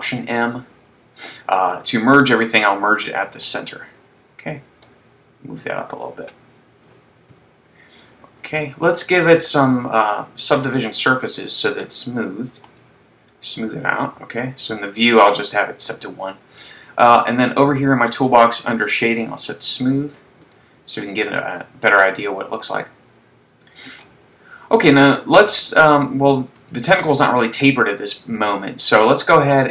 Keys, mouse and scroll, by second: 0.2 alt+m, 5.3 click, 7.4 KP_3, 8.3 Tab, 9.9 click, 11.0 click, 15.6 shift+middle click, 17.3 scroll down 1, 17.9 scroll down 2, 19.4 click, 20.7 shift+middle click, 24.1 Tab, 24.9-25.3 scroll down 1, 25.6 scroll down 1, 26.2 shift+middle click.